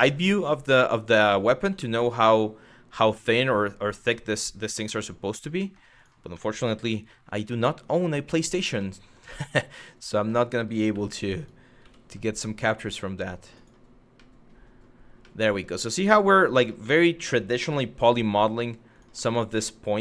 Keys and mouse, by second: 0.4 middle click, 1.5 shift+middle click, 1.9-2.9 middle drag, 3.1 shift+middle click, 3.9 middle click, 4.3 middle click, 5.2 middle click, 5.6 click, 6.1 middle click, 6.4 g, 6.8 y, 8.1 click, 8.5 middle click, 9.5 middle click, 10.5 1, 11.0 click, 11.4 g, 13.2 click, 13.9 middle click, 14.9 middle click, 15.5 middle click, 16.2 click, 16.6 middle click, 17.3 g, 17.6 y, 18.6 click, 18.9 shift+middle click, 19.2 middle click, 19.8 shift+middle click.